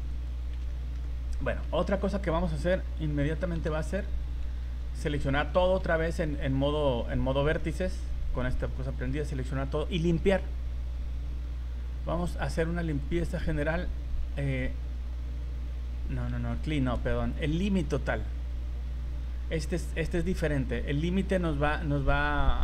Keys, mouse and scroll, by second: 0.1 right click, 0.7 shift+middle click, 1.0 middle click, 1.8 shift+middle click, 3.5 v, 4.2 a, 4.7 a, 5.1-5.5 scroll down 3, 5.5 shift+middle click, 5.8 scroll up 1, 7.6 middle click, 13.0 click, 16.9 ctrl+z.